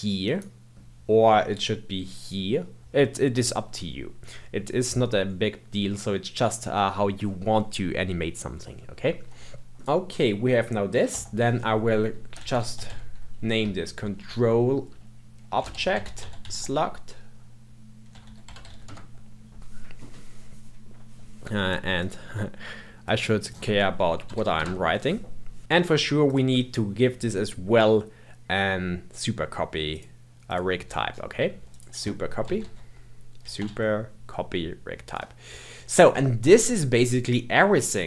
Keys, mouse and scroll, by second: 0.2-3.2 right drag, 9.7 click, 11.1 F2, 21.9-25.0 drag, 25.7 Tab, 26.2 click, 29.9 click, 30.5 click, 30.8-31.7 scroll down 11, 31.7-34.8 drag.